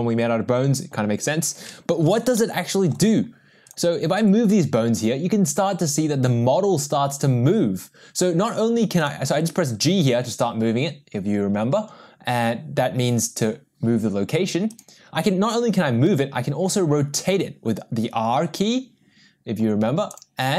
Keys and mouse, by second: 2.4-2.9 middle drag, 4.3 g, 9.4 g, 16.2 r.